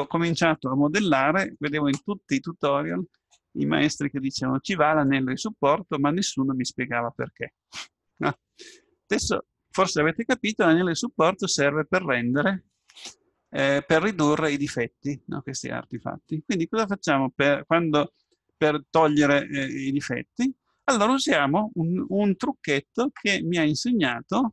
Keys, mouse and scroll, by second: 9.2-11.6 middle drag, 10.6 Tab, 13.6-15.3 middle drag.